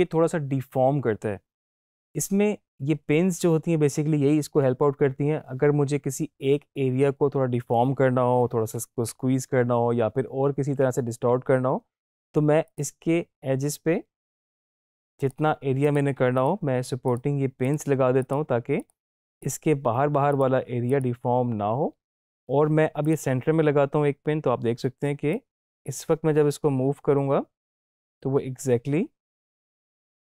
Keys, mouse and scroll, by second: 12.7 click, 25.2 click, 25.4-30.2 drag.